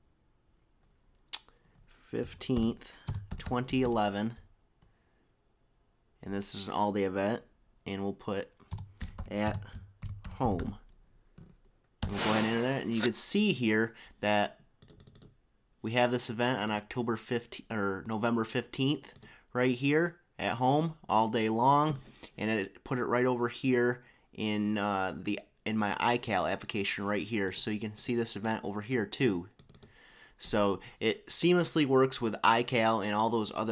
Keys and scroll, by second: 0.8-5.0 typing, 8.9-11.1 typing.